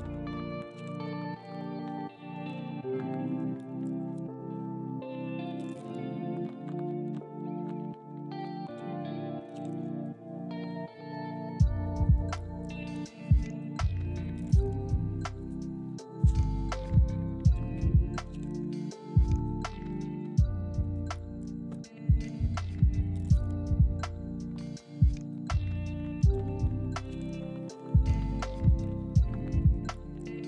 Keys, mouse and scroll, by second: 0.7 shift+middle click, 1.9 z, 4.3 g, 5.8 ctrl+click, 6.3 z, 7.6 shift+middle click, 8.1 scroll down 1, 8.8 middle click, 9.4 scroll down 1, 10.2 middle click, 12.6 KP_1, 13.1-14.2 scroll up 1, 14.4 shift+middle click, 15.1-15.8 shift+scroll up 1, 18.8 z, 21.2 double click, 22.3 Tab, 28.3 scroll up 1, 28.7 shift+middle click.